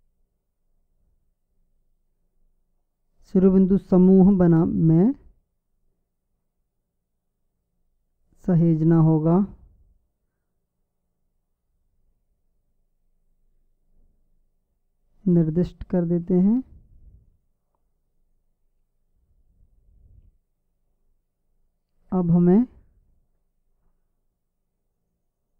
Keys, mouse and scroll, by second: 4.7-6.5 drag, 9.5-11.4 drag, 18.6-20.4 drag.